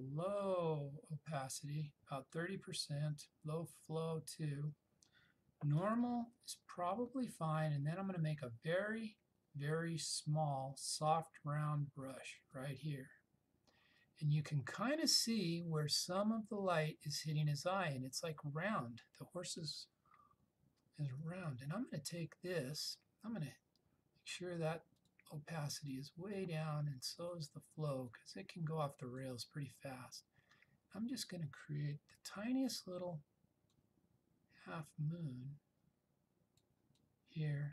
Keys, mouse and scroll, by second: 6.0-9.8 typing, 11.8-12.5 typing, 13.9 typing, 20.8-21.5 typing, 25.1-26.6 drag, 32.2 [, 33.8-36.9 drag.